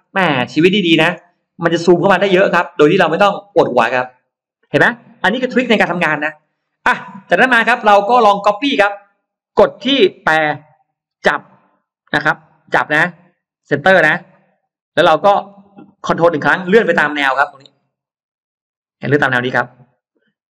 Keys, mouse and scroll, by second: 1.6 scroll up 1, 1.9-2.7 scroll down 2, 3.3-3.9 scroll up 2, 6.2-6.7 scroll down 2, 6.5 middle click, 7.1-7.5 scroll down 2, 7.7-8.3 scroll up 2, 9.1 click, 10.4-10.7 scroll up 1, 10.9 m, 12.6 middle click, 14.5 click, 14.9-15.4 scroll down 4, 15.4 middle click, 18.9 middle click.